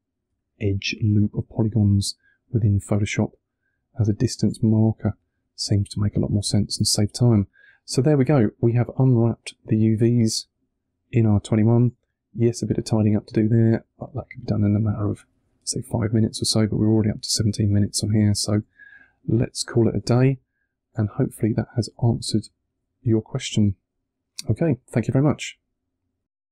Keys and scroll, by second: 0.1 1, 13.4 3, 18.1 2, 20.9 1.